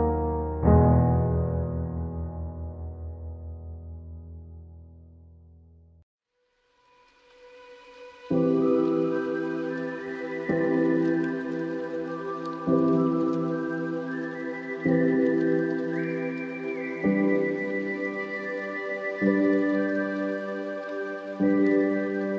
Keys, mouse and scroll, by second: 2.1 alt+s, 4.5 click, 5.1-7.2 middle drag, 7.2 click, 7.9-9.6 drag, 10.0-11.5 middle drag, 11.5 a, 11.8 middle click, 13.4-15.2 drag, 15.7-17.5 middle drag, 18.3 scroll down 1, 18.3 scroll up 2, 19.3 click, 20.3 scroll down 1, 21.3 middle click.